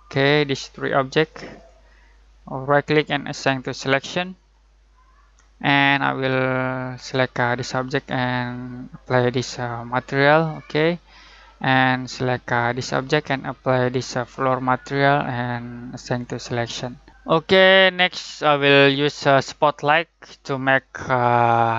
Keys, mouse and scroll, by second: 2.6 right click, 3.4 click, 6.9 click, 9.2 right click, 10.3 click, 12.7 click, 14.5 right click, 16.0 click.